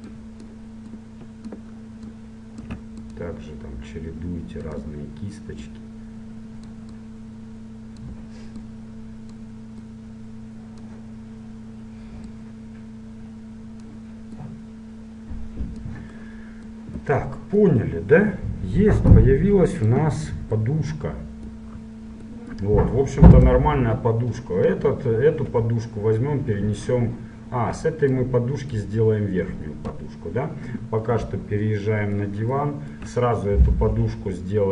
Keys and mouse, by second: 5.8-11.8 drag, 12.4-14.2 drag, 14.6-16.5 drag, 16.5-19.0 middle drag, 19.2-20.6 drag, 20.6-22.4 middle drag, 23.4-25.4 right drag, 25.6 m, 28.2-30.0 drag, 30.0 KP_1, 31.4 middle click.